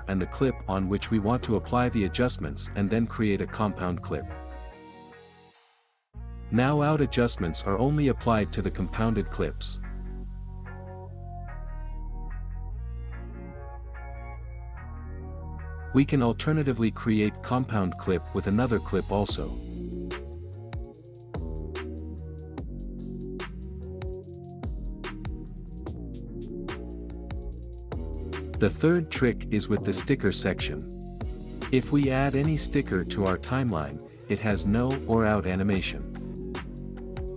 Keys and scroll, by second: 14.0 space, 15.8 ctrl+z, 25.0 space, 26.5 space, 37.1 space.